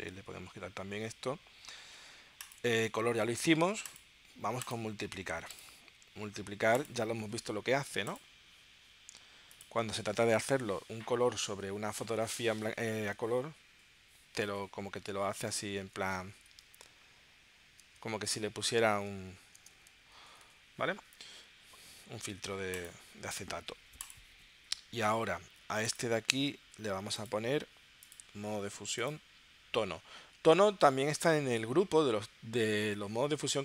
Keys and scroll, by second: 14.6 super+Tab, 15.8 space, 16.6 Down, 17.8 space, 18.6 Down, 18.9 space, 19.6 space, 20.4 super+Tab.